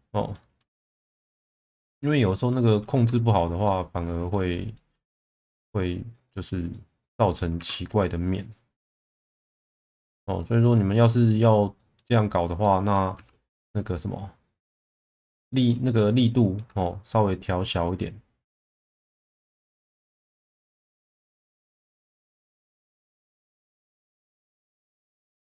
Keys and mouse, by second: 0.7 shift+middle click, 1.9 middle click, 2.9 2, 3.3 click, 3.6-4.8 middle drag, 6.7-7.3 middle drag, 7.5 2, 7.8 click, 8.5 click, 9.6 1, 9.9 click, 10.4 click, 11.2 middle drag, 11.8 middle drag, 12.4 click, 13.2 shift+v, 14.6 click, 15.0 middle drag, 15.5 shift+middle drag, 15.8-16.6 alt+middle drag, 17.9 click, 19.3 shift+v, 20.7 click, 21.6 click, 21.9 shift+v, 22.6 click, 23.3 click, 24.0 Tab, 24.6 middle click, 25.2 alt+middle click.